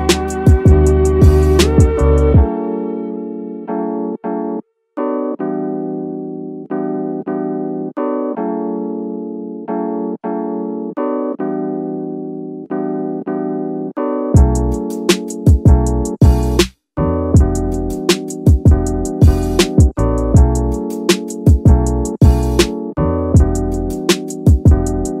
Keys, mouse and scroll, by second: 1.5 s, 1.7 z, 4.1 click, 4.4-4.7 scroll up 2, 4.7 shift+middle drag, 5.9 s, 6.0 z, 7.4 click, 8.1-10.3 drag, 10.5 scroll down 2, 10.8-11.7 middle drag, 15.2 KP_7, 16.8-17.3 drag, 17.6-18.2 middle drag, 18.7 KP_3, 19.3-20.3 scroll up 2, 20.3-21.8 drag, 23.1 KP_1, 23.6 scroll up 1, 24.2-24.6 scroll down 2, 24.6 shift+middle click, 24.9-25.2 scroll up 2.